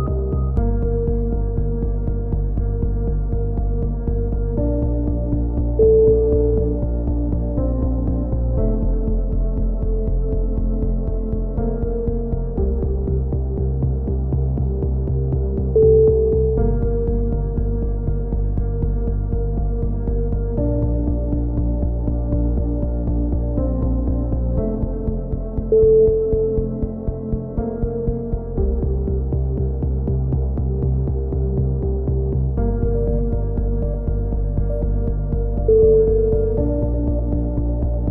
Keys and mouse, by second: 1.4 Tab, 1.6 middle click, 2.3 middle drag, 2.7-4.4 middle drag, 5.6 middle click, 5.6 KP_7, 5.9 z, 6.8-9.8 drag, 9.8 z, 10.1 a, 10.3 z, 10.5 z, 10.7 drag, 11.7-13.6 drag, 13.6-14.4 right drag, 13.6 z, 13.7-14.4 drag, 15.2 KP_7, 15.6-18.7 drag, 18.7 a, 18.8 middle click, 18.9 z, 19.1-19.6 drag, 21.1-22.4 drag, 21.4 z, 22.4-23.8 middle drag, 22.7 c, 23.8-26.8 drag, 23.9 KP_7, 26.8 a, 26.9 z, 27.2 z, 27.7 z, 27.9 Tab, 28.1-28.5 middle drag, 29.9 Tab, 30.2-30.8 middle drag, 31.3 z, 31.9 c, 35.5 a, 36.6-38.1 right drag.